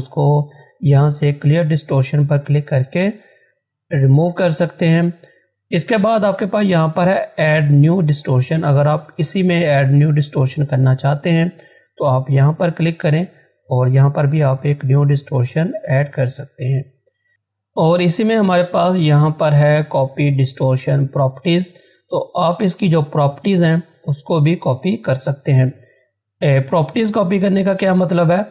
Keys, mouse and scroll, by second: 10.9-17.3 drag.